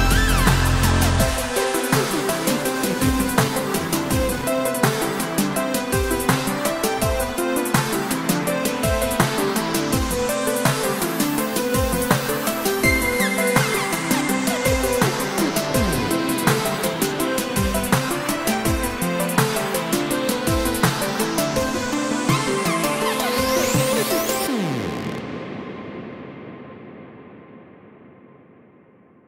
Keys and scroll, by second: 9.1 BackSpace, 10.7 7, 12.3 Return.